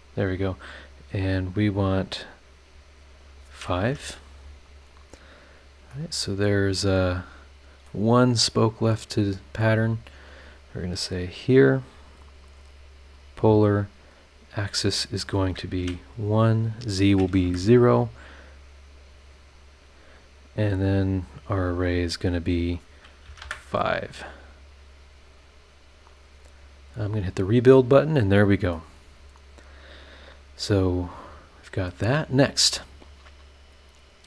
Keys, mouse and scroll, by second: 0.3 click, 1.6 click, 1.9 click, 2.4 scroll down 2, 3.3 click, 3.8 KP_5, 4.8 click, 5.5 scroll down 1, 5.9-8.0 middle drag, 6.0-8.0 drag, 6.0-8.0 right drag, 8.0 scroll up 1, 8.5 click, 10.3 click, 12.1 click, 12.6 click, 13.1 click, 14.1 click, 15.2 click, 15.8 KP_1, 16.8 click, 17.4 KP_0, 18.1-18.4 scroll down 2, 18.5-19.1 scroll up 4, 19.5 click, 20.7 click, 21.1-21.6 scroll down 2, 22.7 click, 23.2 KP_5, 23.4 KP_Enter, 24.2 click, 27.2 click, 27.8 scroll down 2, 28.2 scroll up 2, 28.7-32.1 middle drag, 28.8-32.1 drag, 28.8-32.1 right drag.